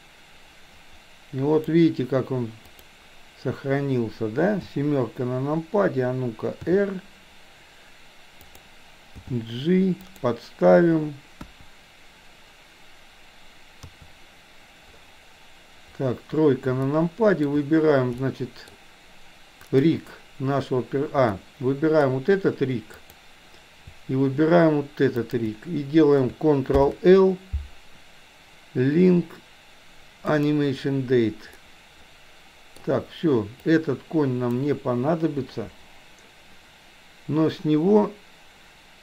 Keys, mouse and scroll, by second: 2.8 drag, 4.7 KP_7, 6.7 r, 9.2 g, 11.4 KP_1, 13.8 KP_3, 16.9-17.5 shift+middle drag, 18.3 middle click, 19.5 click, 21.4-22.0 middle drag, 22.9 click, 25.3 shift+click, 26.7 ctrl+l, 31.7-32.8 middle drag, 33.7-34.7 drag, 35.5 Delete.